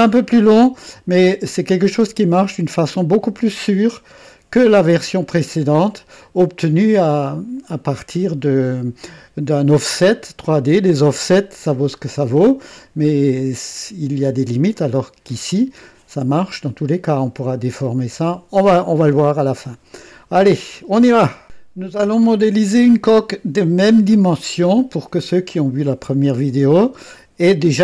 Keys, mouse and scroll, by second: 5.8 click, 19.2 click.